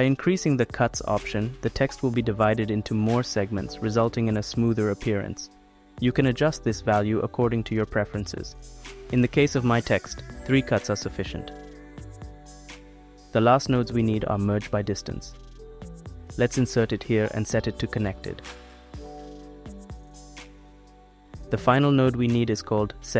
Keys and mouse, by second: 2.0 click, 3.6 click, 4.0 middle click, 4.2 click, 4.4 middle click, 4.6 click, 4.7 middle click, 4.8 click, 6.0 middle click, 6.2 middle click, 6.4 click, 10.5 m, 10.9 m, 13.6 shift+a, 17.2-18.8 drag, 19.0 click, 19.9-21.1 drag, 22.1 shift+a.